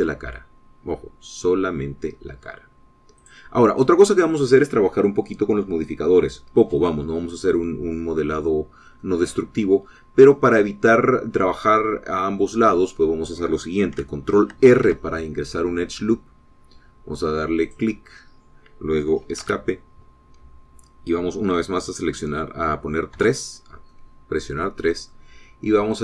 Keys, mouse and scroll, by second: 4.0 click, 4.5-9.8 middle drag, 9.8-12.1 drag, 9.8-12.1 right drag, 15.6 ctrl+r, 18.6 click, 20.2 Escape, 24.0 3, 24.8-26.0 middle drag.